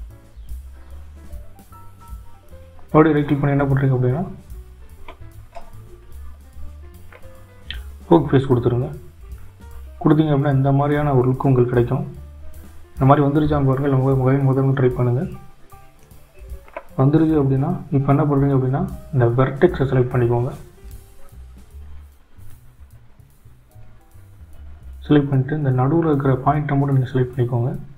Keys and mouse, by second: 14.9 right click.